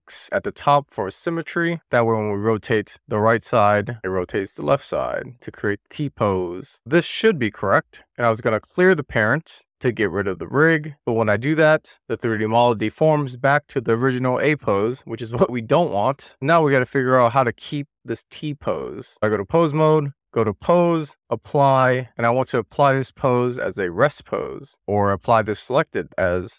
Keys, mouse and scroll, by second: 0.0 super+z, 1.3 click, 2.2 click, 8.0 ctrl+alt+p, 9.0 alt+p, 12.3 super+z, 13.5 click, 14.3 click, 16.3 click, 17.0-17.7 drag, 20.3 click, 20.8-26.5 drag.